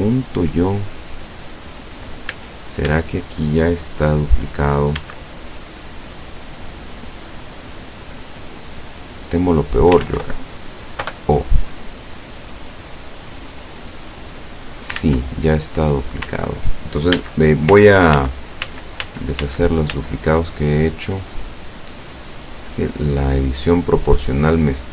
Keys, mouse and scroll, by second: 2.4 z, 5.1 a, 6.4-6.7 scroll up 2, 7.6 right click, 8.4-10.2 drag, 10.1 ctrl+z, 11.1 o, 11.8-15.0 drag, 15.0 ctrl+z, 15.7 ctrl+middle click, 17.2 a, 18.2 ctrl+z, 22.7-24.9 drag.